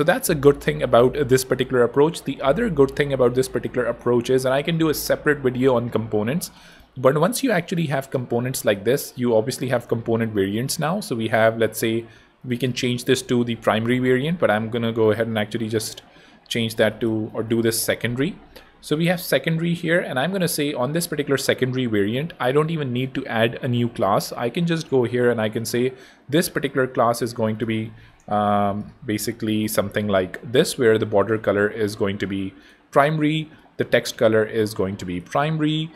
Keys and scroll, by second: 11.7 Escape, 16.2-17.7 typing, 27.5-29.0 typing, 29.1 super+t, 29.4 super+i.